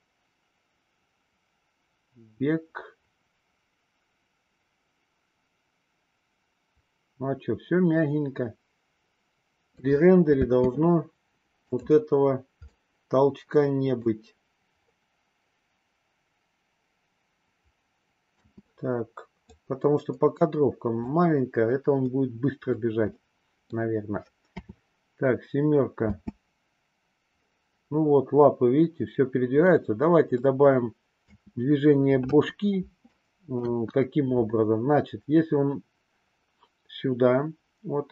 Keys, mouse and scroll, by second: 10.5 space, 11.7 click, 12.7-14.1 middle drag, 18.3 space, 19.4-21.0 drag, 22.0-22.7 middle drag, 23.1-23.7 middle drag, 24.6 KP_7, 26.0 space, 29.6-30.5 middle drag, 31.3 space, 32.2 KP_3, 32.9-33.6 middle drag, 33.7 KP_1.